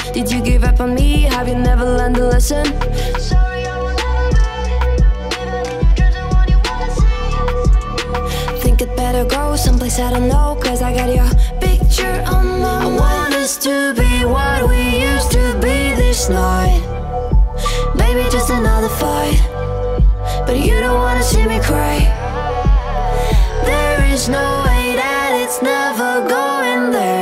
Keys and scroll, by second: 0.3-2.4 typing, 3.5-5.2 typing.